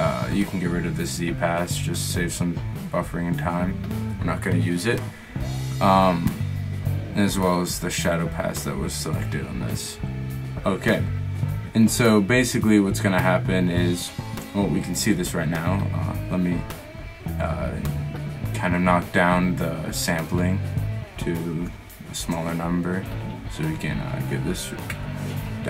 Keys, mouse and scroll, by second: 4.1 middle click, 6.0 middle click, 6.3-7.8 middle drag, 11.8 middle click, 12.1 middle click, 16.1-17.9 middle drag.